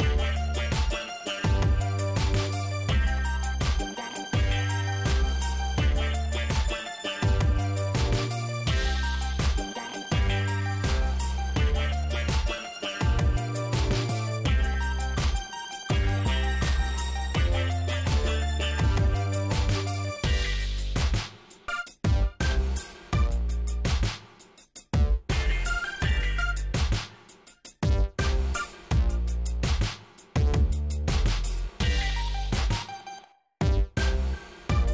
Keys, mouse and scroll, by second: 3.4 ctrl+click, 4.6 ctrl+click, 6.0 ctrl+click, 6.7 ctrl+shift+right click, 8.3 click, 10.1 7, 11.8 click, 12.9 scroll down 1, 13.4 shift+right click, 15.2 click, 15.5 space, 19.1 click, 20.5 click, 22.7 click, 26.1 click, 27.5 scroll down 2, 28.5 click, 28.9 space, 29.7 shift+right click, 31.2 shift+middle click, 32.1 shift+right click, 34.8 click.